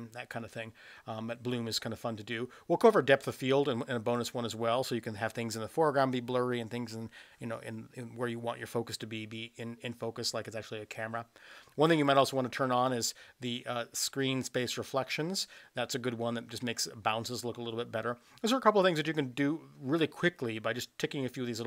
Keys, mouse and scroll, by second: 3.3 click, 4.3 click, 12.2 click, 12.9 click.